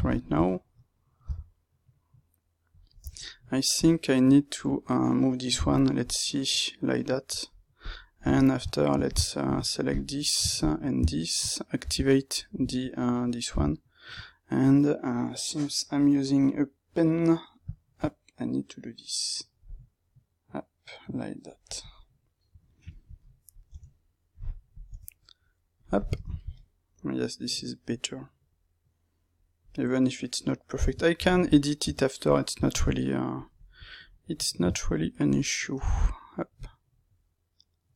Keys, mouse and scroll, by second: 1.1 g, 2.7 click, 3.0 Tab, 3.7 click, 4.6 click, 5.5 g, 7.7 click, 8.3 Tab, 9.0-11.7 drag, 11.7 o, 21.7-25.7 middle drag, 23.7 Tab, 25.7 click, 26.5-30.5 middle drag, 33.3 click, 33.9 middle click, 34.7 alt+right click, 35.5-36.5 middle drag, 36.5 click.